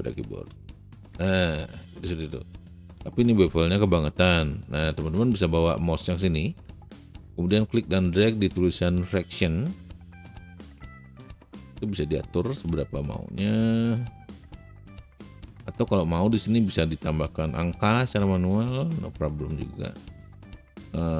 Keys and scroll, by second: 0.5 ctrl+b.